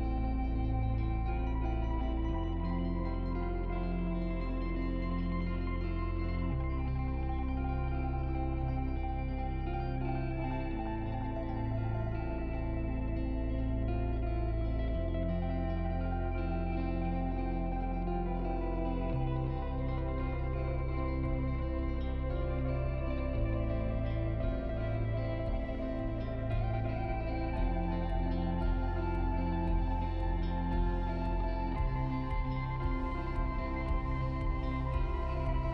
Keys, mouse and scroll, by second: 5.4 shift+click, 8.3 click, 12.5-15.6 drag, 24.0 click, 28.8 click.